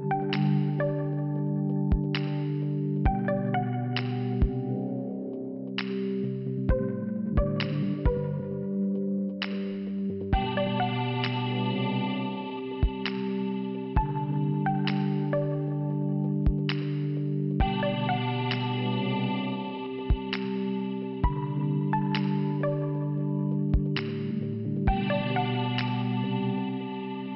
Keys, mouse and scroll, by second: 9.0 click, 9.1 click, 11.6 click, 11.7 click, 13.1 click, 13.2 click, 13.9 scroll down 2, 15.1 click, 16.1 right click, 16.8 click, 17.0 click, 18.2 click, 18.3 click, 18.7 click, 18.8 click, 19.5 click, 20.5 click, 22.3 click, 22.4 click, 23.4 click, 23.5 click, 23.8 click, 23.9 click, 24.5 click, 25.5 c, 26.3 click, 26.4 click.